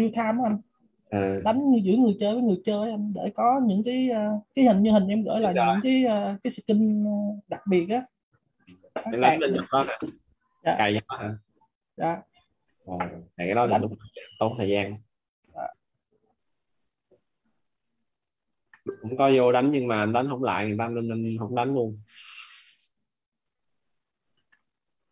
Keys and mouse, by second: 3.0 click, 17.7 click, 24.0 click.